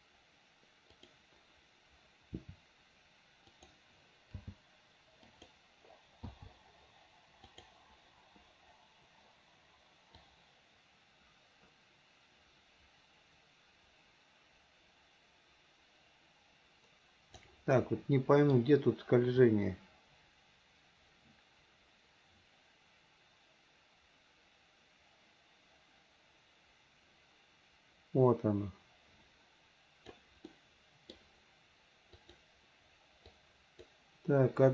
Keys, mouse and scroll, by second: 1.0 click, 2.4 r, 4.4 g, 6.3 i, 7.5 click, 10.3-17.5 drag, 17.8-18.6 middle drag, 19.5-30.3 drag, 30.5-31.2 middle drag, 32.2 click, 33.3-33.9 drag.